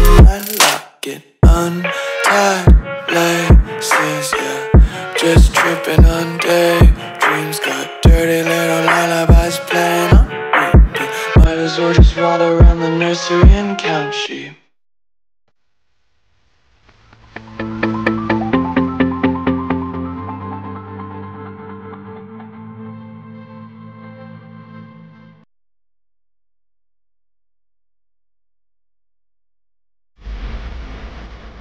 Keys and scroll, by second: 1.9 space, 2.4 super+space, 2.5 super+space, 2.6 super+space, 2.7 super+space, 16.7-17.3 typing, 29.6 space.